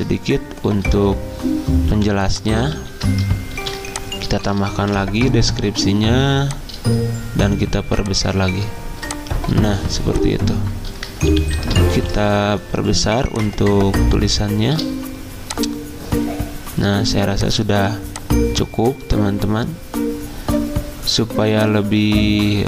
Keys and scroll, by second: 1.9 t, 2.7 ctrl+a, 3.6 ctrl+c, 4.8 ctrl+v, 11.4 ctrl+t, 12.0 ctrl+t.